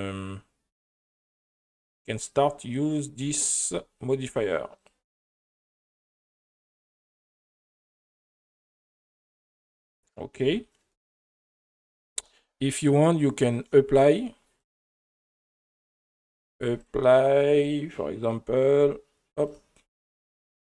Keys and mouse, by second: 0.9 click, 1.7 click, 3.7 space, 4.8-6.0 drag, 7.3-8.6 drag, 12.1 space, 13.5 click, 14.6 click, 15.6 right click, 18.2 click, 19.5 click.